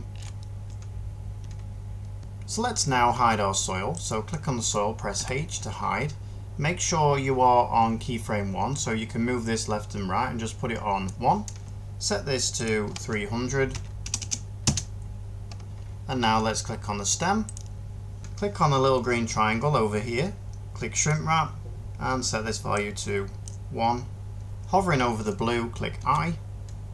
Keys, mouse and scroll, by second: 5.0 h, 13.6-13.9 typing, 14.5 Return, 25.9 i.